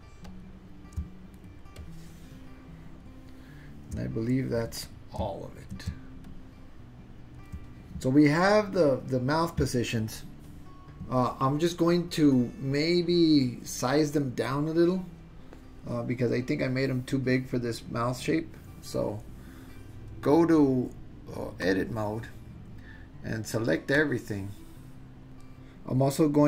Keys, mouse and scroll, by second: 0.3 click, 1.6 shift+middle click, 1.7-3.0 shift+drag, 6.1 ctrl+middle click, 6.2-7.4 ctrl+drag, 20.5-21.8 drag, 24.0-25.3 drag.